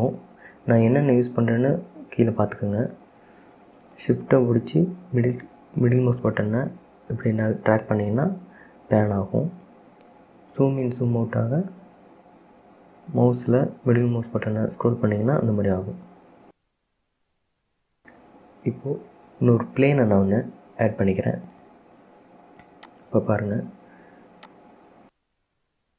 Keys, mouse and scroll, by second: 4.2-6.2 shift+middle drag, 6.2-7.2 scroll up 4, 7.2-7.8 scroll up 1, 7.8-10.8 shift+middle drag, 10.8-11.5 scroll up 1, 11.5 scroll up 1, 12.5-13.3 scroll up 1, 13.3-14.1 scroll down 8, 14.1-15.0 scroll up 7, 15.0-15.7 scroll down 5, 15.9-16.3 scroll up 3, 16.3 scroll down 1, 16.5-18.2 middle drag, 18.2 KP_1, 20.8 KP_3, 22.9-25.9 drag.